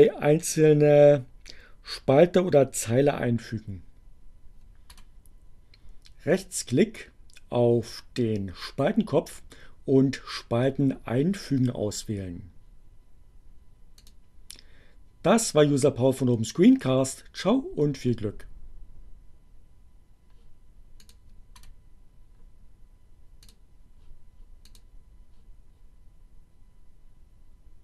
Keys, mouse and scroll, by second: 4.5 right click, 12.0 click, 12.8 click, 20.4 click, 21.5 right click, 22.8 click, 24.8 click.